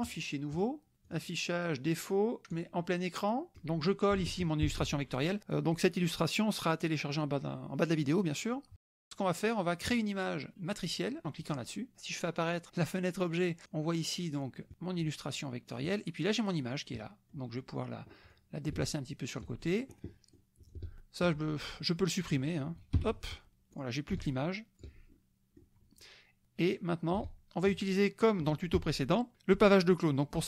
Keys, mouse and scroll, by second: 0.1 click, 0.6 click, 1.0 click, 2.5 click, 3.5 click, 4.7 ctrl+v, 11.5 click, 12.7 click, 13.6 click, 14.3 click, 15.7 click, 16.3 click, 17.0 click, 18.3-19.9 drag, 20.1-21.4 ctrl+drag, 22.9 Delete, 23.7 click, 24.1-25.0 ctrl+drag, 25.1 ctrl+click, 27.1-27.8 ctrl+drag.